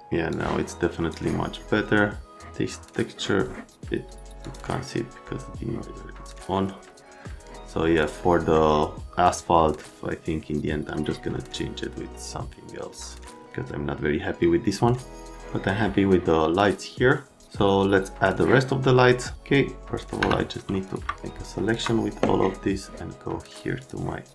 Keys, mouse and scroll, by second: 0.3 click, 4.4 click, 6.5 right click, 8.2 right click, 10.9 right click, 20.2 F3, 20.8 click, 21.7 click, 23.8 click.